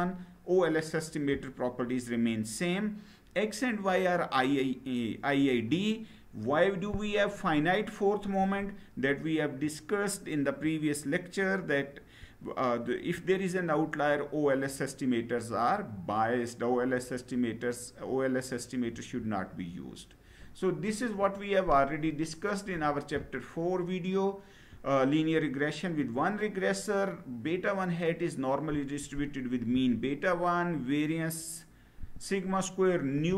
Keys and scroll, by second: 18.6 Down.